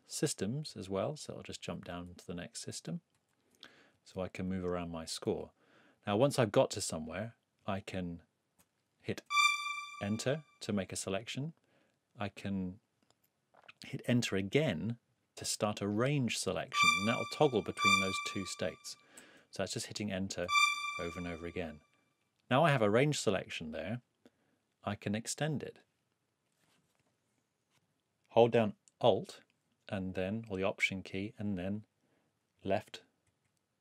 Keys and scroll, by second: 1.6 super+Up, 3.9 super+Right, 4.5 super+Left, 5.2 super+Up, 7.6 super+Right, 9.2 super+Return, 10.8 Return, 16.6 Return, 19.1 Return, 20.4 Return, 30.1 alt+Right, 31.3 alt+Right, 32.6 alt+Right.